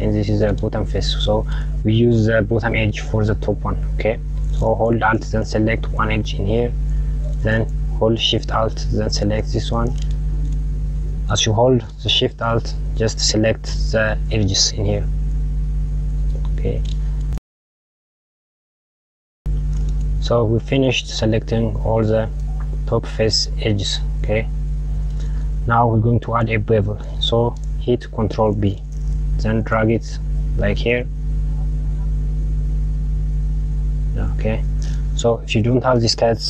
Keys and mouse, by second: 6.4 alt+click, 9.6 alt+shift+click, 14.8 alt+shift+click, 16.2 alt+shift+click, 17.3 alt+shift+click, 18.0 alt+shift+click, 18.6 alt+shift+click, 18.8 alt+shift+click, 19.3 alt+shift+click, 20.5 click, 28.5 ctrl+b, 34.6 KP_Add, 34.8 KP_Add.